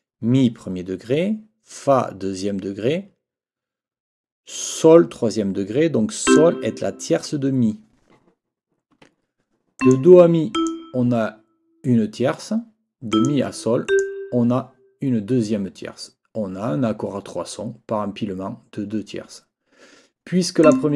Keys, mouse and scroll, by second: 6.3 click, 8.9 Escape, 9.8 click, 10.5 click, 13.1 click, 13.9 click, 20.6 click.